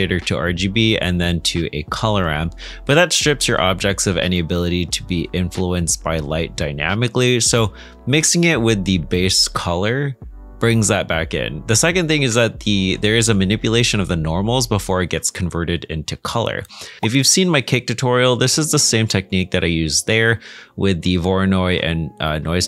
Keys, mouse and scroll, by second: 11.9-12.3 scroll down 1, 12.5 shift+middle click.